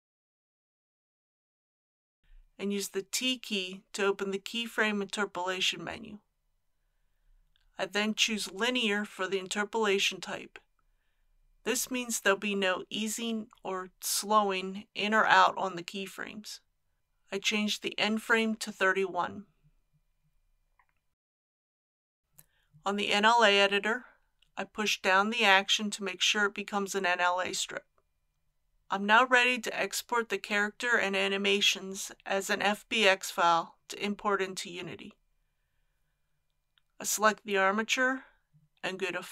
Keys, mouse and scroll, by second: 2.5 t, 8.0 click, 16.6 KP_3, 16.8 KP_1, 19.1-34.2 drag.